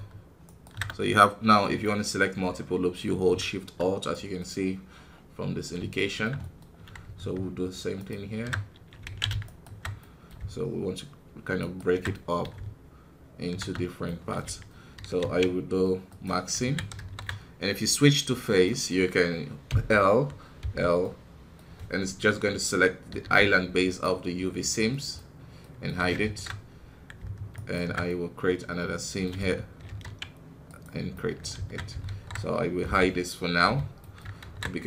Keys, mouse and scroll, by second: 0.4-1.8 alt+shift+right drag, 1.8-6.6 middle drag, 6.6 scroll up 2, 7.9-9.1 alt+shift+right drag, 9.1 ctrl+z, 9.4 alt+shift+right click, 9.9-11.5 middle drag, 11.5 alt+shift+right click, 12.0-14.9 middle drag, 14.9 ctrl+e, 16.9 alt+KP_3, 18.2 scroll down 1, 18.6-19.6 middle drag, 19.6 l, 20.9-23.1 middle drag, 23.1 h, 23.9-26.0 middle drag, 26.0 scroll up 1, 26.9 scroll up 1, 27.5 alt+right click, 28.0-29.8 middle drag, 29.8 ctrl+e, 31.1 middle click, 31.5 alt+a, 32.0 alt+KP_3, 32.8 l, 33.9-34.8 middle drag.